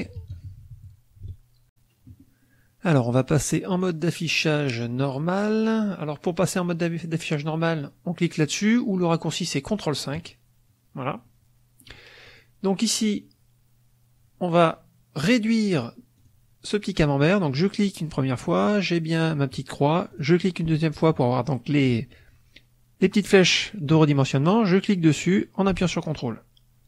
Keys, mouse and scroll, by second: 1.6 click, 3.6 click, 10.0 click, 11.2 middle click, 12.2 click, 16.1 click, 17.5 click, 20.0 click, 24.4-26.8 drag.